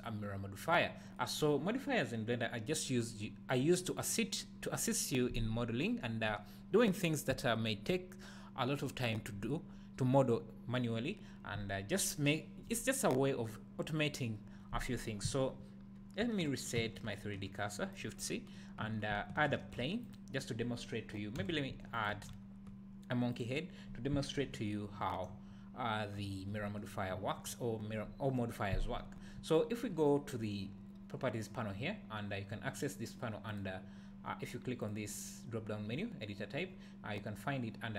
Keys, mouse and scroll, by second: 0.7 click, 16.8 shift+c, 19.5 shift+a, 21.4 x, 22.3 shift+a, 24.4 KP_Decimal, 33.5-37.9 drag.